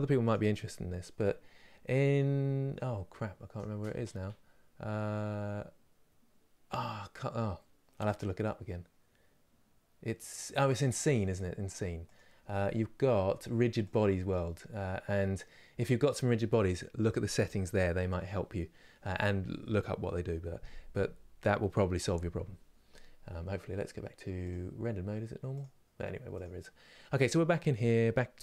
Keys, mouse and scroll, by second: 0.0-28.4 shift+middle drag.